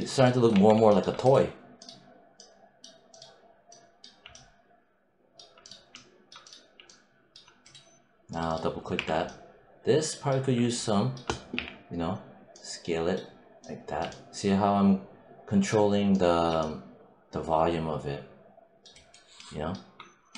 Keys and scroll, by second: 0.4 1, 8.8 4, 10.3 5, 11.4 r.